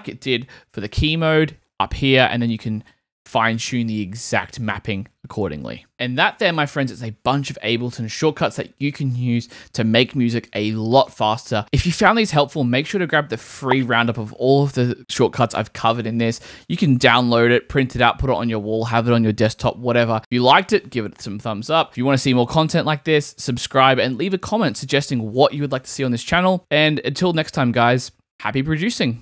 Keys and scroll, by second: 0.5 super+m, 0.9 super+k, 3.3 super+k.